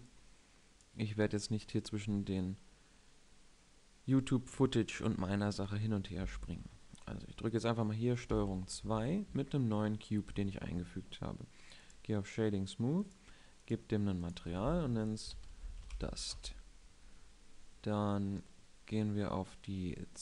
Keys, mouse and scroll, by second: 0.3 click, 0.7-1.6 drag, 8.4 ctrl+2.